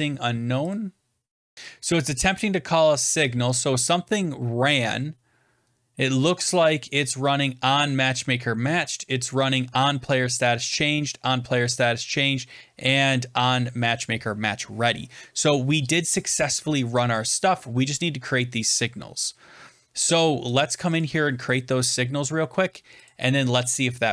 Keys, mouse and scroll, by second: 0.6 click, 1.5 click, 1.5-2.0 scroll down 5, 19.5 scroll down 5, 20.5 click, 20.9 click, 21.4 click, 21.4-21.8 scroll, 23.0 click, 23.5 alt+Tab.